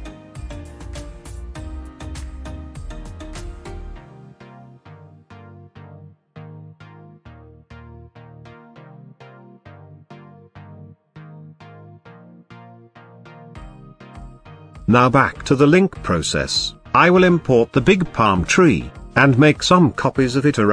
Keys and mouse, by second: 0.0 click, 0.3 Tab, 1.3 KP_0, 2.6 click, 3.4 g, 3.6 y, 9.1 shift+click, 12.8 middle drag, 13.7 middle click, 15.6-16.7 drag.